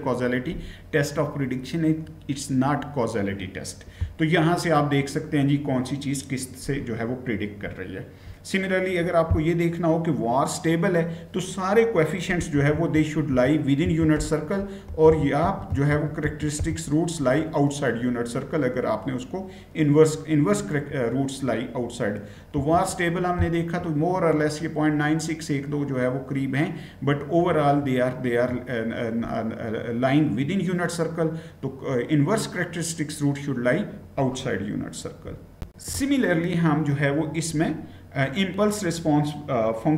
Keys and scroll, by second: 12.2-16.9 typing, 22.3 Return, 35.4 shift+F9.